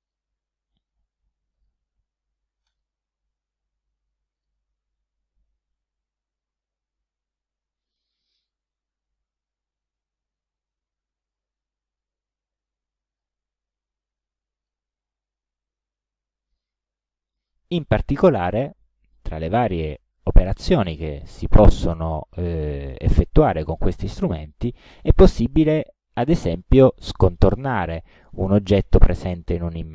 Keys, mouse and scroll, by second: 0.1 click, 1.6 click, 2.7 click, 4.4 click, 6.0-6.4 ctrl+scroll down 2, 6.9 ctrl+scroll down 2, 7.5 ctrl+scroll up 1, 8.1 ctrl+click, 9.4-11.6 ctrl+drag, 12.2-13.4 ctrl+drag, 13.7-14.9 ctrl+drag, 15.2 ctrl+scroll up 2, 16.0 ctrl+click, 17.0 ctrl+scroll down 1.